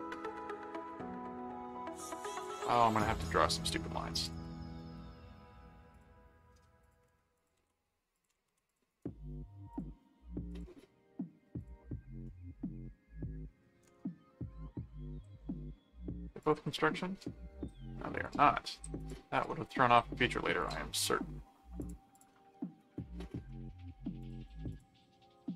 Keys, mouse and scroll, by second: 0.7 right click, 2.0 right click, 3.2 click, 4.2 click, 4.8 right click, 5.9 click, 6.8 click, 7.5 alt+c, 8.1 ctrl+alt+click, 8.5 alt+c, 8.9 right click, 9.7 click, 10.5 click, 11.6 click, 16.4 click, 18.1 click, 19.0 click, 20.6 click, 21.8 click, 22.8 right click, 24.2 click.